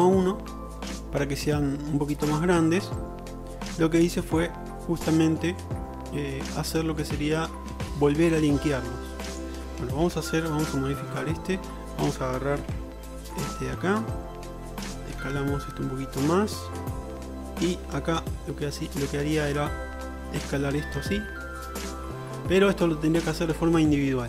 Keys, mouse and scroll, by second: 4.8 middle drag, 5.0-9.4 drag, 9.4 middle click, 9.5-13.0 drag, 10.1 Tab, 12.7 3, 13.1-14.1 ctrl+alt+drag, 15.0 ctrl+click, 15.2 ctrl+KP_Add, 18.4 s, 20.3 click.